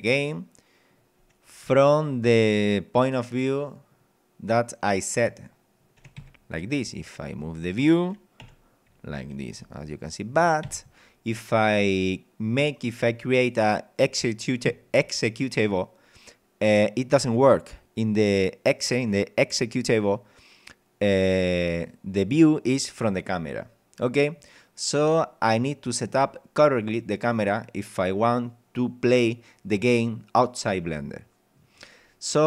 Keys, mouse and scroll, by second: 1.7 w, 6.3 Escape, 6.5-7.9 middle drag, 8.4 p, 9.6 w, 10.7 Escape, 11.4 scroll down 2, 12.0 middle click, 21.9-23.2 middle drag, 23.5-24.3 scroll up 4, 24.3 scroll down 2.